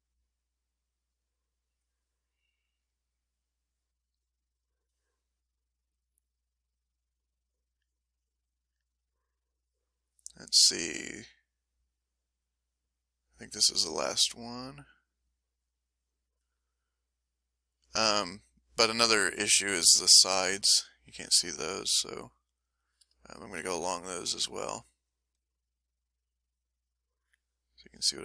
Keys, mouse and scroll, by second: 0.2-1.4 drag, 1.5 click, 2.7 click, 5.1 click, 6.7-9.2 drag, 9.4 middle click, 10.0 middle click, 11.6 click, 12.5-14.2 drag, 14.4-16.3 drag, 16.8-20.5 drag, 21.5-23.1 drag, 24.1-27.3 drag, 27.5-28.2 drag.